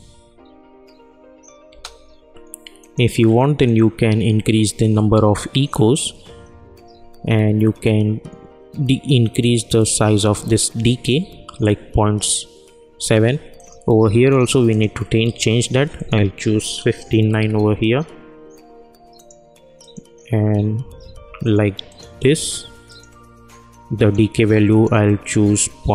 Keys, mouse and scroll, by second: 1.6 space, 2.8-13.5 drag, 19.1 click.